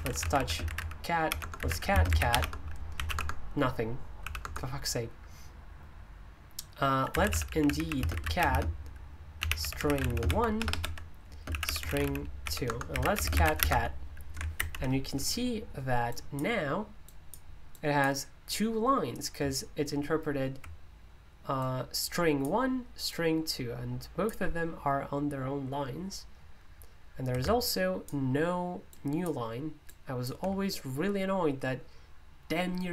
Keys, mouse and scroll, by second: 0.0-4.4 typing, 6.8-13.9 typing, 16.1 click, 17.0-18.5 drag, 21.6-22.9 ctrl+drag, 23.1-24.7 ctrl+drag, 27.7 shift+click, 28.9 click, 29.9-32.9 drag.